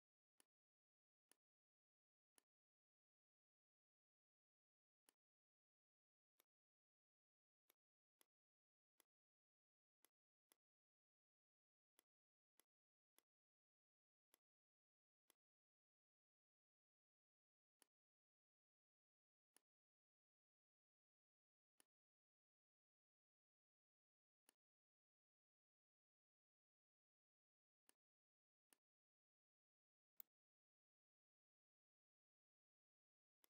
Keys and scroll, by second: 2.3 space, 3.6 m, 18.9 ctrl+g, 20.8 ctrl+g, 23.0 ctrl+g.